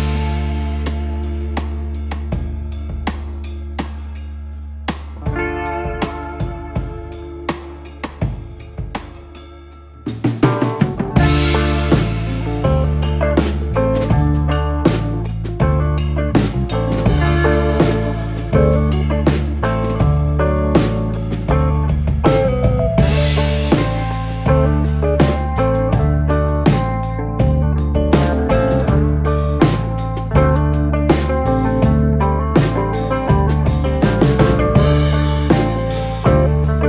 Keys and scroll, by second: 2.0-3.1 typing, 4.6-6.5 typing, 7.6 Return, 14.0-14.9 typing, 21.4 o, 22.7-24.3 typing, 25.7-27.2 typing, 28.3-31.3 typing, 33.8-34.5 typing.